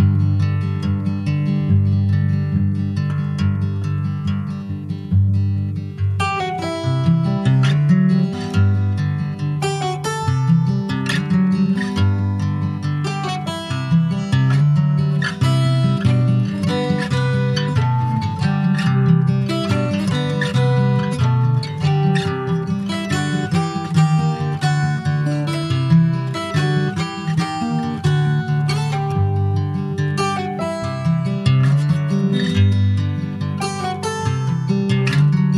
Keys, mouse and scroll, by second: 0.0 ctrl+s, 0.2-1.9 middle drag, 1.9 ctrl+r, 2.7 right click, 3.6 middle click, 4.1 s, 5.4 middle click, 5.9 ctrl+b, 8.7 Tab, 9.0 click, 9.2 scroll down 4, 9.4 middle click, 10.2-10.5 ctrl+scroll up 2, 10.5 ctrl+z, 10.8 ctrl+z, 10.9 ctrl+z, 11.4 ctrl+z, 12.3 middle click, 12.6-13.3 scroll up 4, 12.8 shift+middle click, 13.3 ctrl+s, 13.6 click, 15.6 w, 15.7 click, 16.1-16.5 scroll up 2, 16.9 3, 17.1 click, 17.7 alt+shift+click, 18.2 alt+shift+click, 19.0 middle click, 19.6 e, 20.0 alt+s, 22.0-23.1 middle drag, 23.1 2, 23.2 click, 23.8 alt+shift+click, 24.4 middle click, 25.1 alt+shift+click, 26.0 alt+shift+click, 27.0 ctrl+b, 31.3 click, 31.9 alt+shift+click, 32.9 ctrl+b.